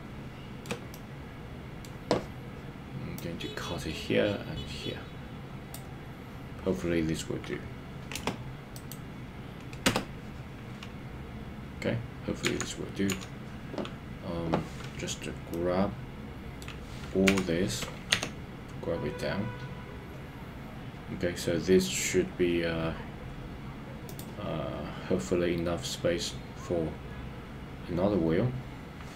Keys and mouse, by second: 0.9 middle click, 3.2-10.3 drag, 12.6 KP_1, 13.2 KP_3, 15.5-16.8 middle drag, 17.4 KP_3, 18.2 g.